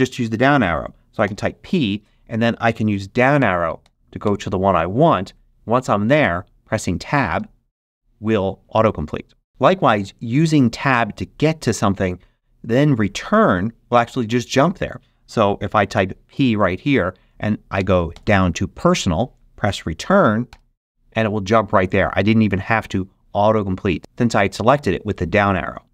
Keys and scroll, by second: 4.2 Down, 7.3 Tab, 15.9 p, 17.7 Down, 20.4 Return.